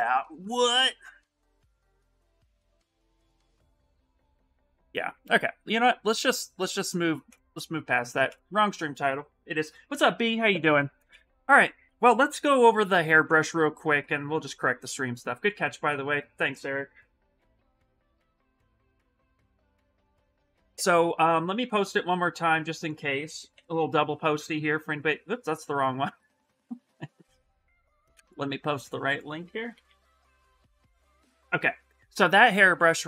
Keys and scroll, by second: 5.1 Escape, 23.3 ctrl+v, 23.6 Return, 29.5 ctrl+c, 29.6 ctrl+c, 30.9 ctrl+v, 31.2 Return.